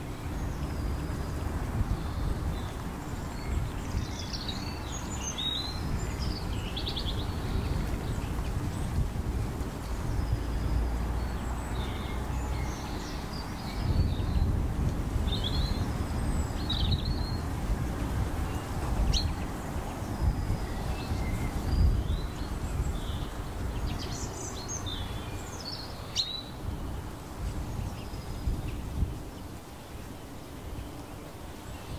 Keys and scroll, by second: 7.3 ctrl+t, 19.9 ctrl+alt+shift+e.